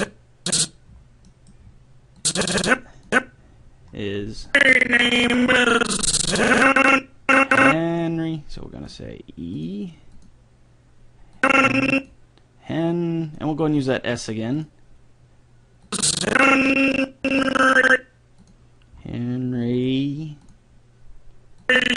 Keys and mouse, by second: 0.9-2.2 middle drag, 2.2-4.0 drag, 4.5-6.2 drag, 8.9-10.3 drag, 16.8 click, 18.4-21.9 drag.